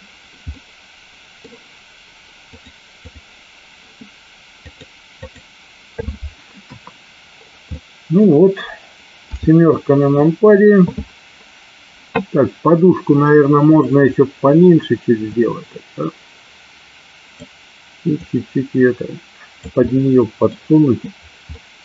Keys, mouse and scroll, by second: 0.5 middle click, 2.6 click, 4.8 click, 6.6 KP_1, 7.8-8.3 middle drag, 9.4 KP_7, 15.3-17.4 drag, 18.2-19.7 drag, 19.8-20.2 scroll up 1, 20.2 middle click, 21.5-21.8 middle drag.